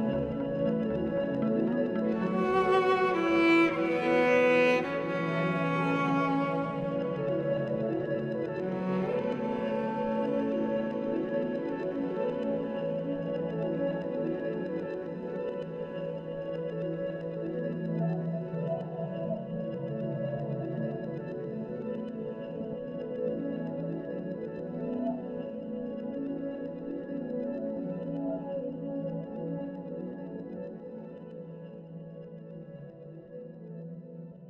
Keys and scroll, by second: 0.0 ctrl+=, 0.2 [, 1.1 [, 5.3 ctrl+z, 7.6 ], 9.8 [, 9.9 [, 10.2 [, 12.4 ctrl+-, 12.5 ctrl+-, 12.9 ctrl+-, 13.6 ctrl+=, 13.6 ctrl+=, 14.3 ctrl+-, 14.6 ctrl+-, 15.3 ctrl+=, 17.8 ctrl+z, 22.5 ctrl+z, 27.4 ctrl+z, 33.0 z.